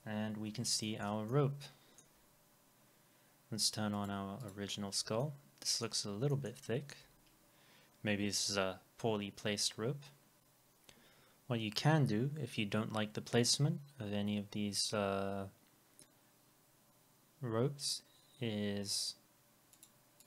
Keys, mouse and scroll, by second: 0.5 F4, 0.8 middle click, 1.3 alt+middle click, 4.0 double click, 5.2 alt+middle click, 6.3 middle click, 6.6 alt+middle click, 7.4 scroll up 1, 19.8 double click.